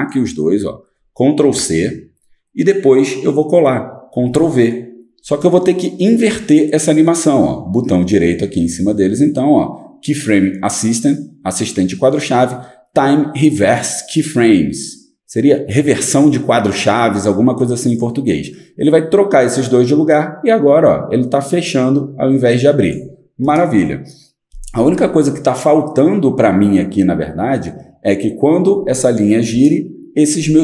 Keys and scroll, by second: 1.4 ctrl+c, 4.2 ctrl+v.